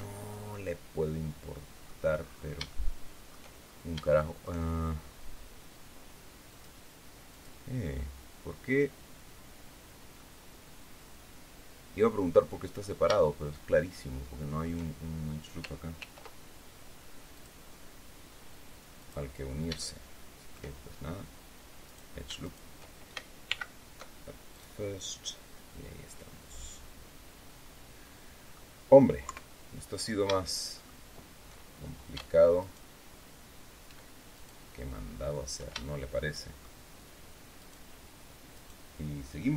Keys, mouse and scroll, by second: 0.0 alt+shift+scroll down 2, 0.4-1.9 drag, 2.1-2.6 scroll up 3, 2.6 shift+click, 3.6 shift+scroll up 2, 3.9 shift+click, 6.4 click, 7.2 click, 8.6-9.0 scroll up 1, 9.0 scroll down 1, 10.1-12.9 drag, 13.0-14.7 shift+middle drag, 15.9 ctrl+r, 17.3 click, 18.9 click, 19.6 shift+scroll up 2, 19.7 shift+middle click, 20.8 shift+scroll up 2, 21.8 right click, 22.3 shift+right click, 23.4 alt+m, 24.4 click, 25.2-25.5 scroll down 1, 26.0-26.4 scroll down 1, 26.7-28.6 middle drag, 29.1 KP_3, 29.6-30.1 scroll down 1, 30.3 shift+middle click, 31.4 shift+scroll up 1, 32.5 alt+shift+right click, 34.2 shift+right click, 35.7-36.7 shift+middle drag, 37.5 shift+right click, 38.4 shift+right click.